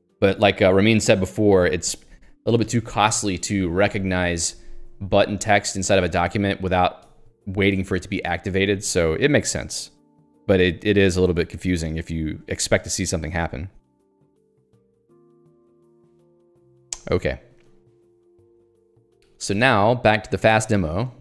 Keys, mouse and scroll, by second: 7.1 Escape, 17.7 click, 18.0 q, 19.6 ctrl+alt+j, 20.2 ctrl+j, 20.4 ctrl+k, 20.7 Return.